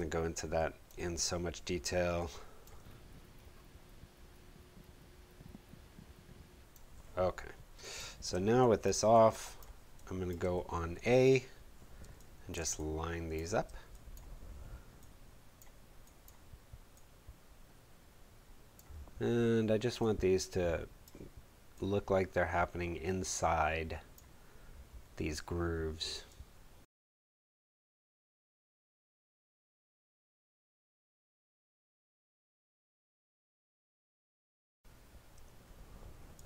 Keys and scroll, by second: 2.7 space, 8.2 space, 10.5 a, 12.0 space, 19.7 space, 25.0 space, 25.9 super+z, 26.7 Delete.